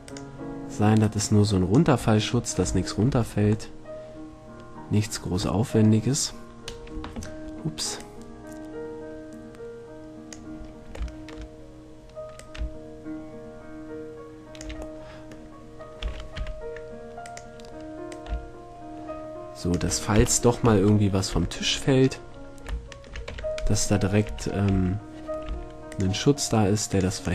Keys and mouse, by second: 1.2-3.0 drag, 3.0-4.1 middle drag, 4.2-4.5 middle drag, 4.7 middle click, 8.2-10.0 drag, 10.8 middle click, 12.5-13.9 drag, 15.2-15.8 middle drag, 16.2 s, 17.5-18.4 drag, 20.3 KP_1, 21.2-21.5 middle drag, 21.5 z, 23.5 Tab, 24.5 a, 24.9 x, 25.7 c.